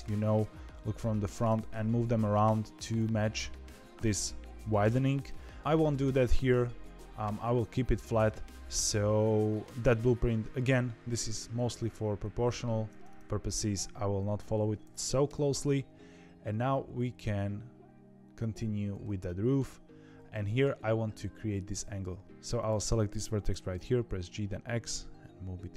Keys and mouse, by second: 0.3 KP_1, 1.4 g, 3.9 KP_7, 5.2 KP_1, 5.6 z, 6.2 `, 6.8 ctrl+z, 12.9 middle click, 15.2 KP_7, 16.6 1, 19.2 shift+middle click, 20.2 shift+middle click, 22.2 Escape, 22.6 click, 23.4 g.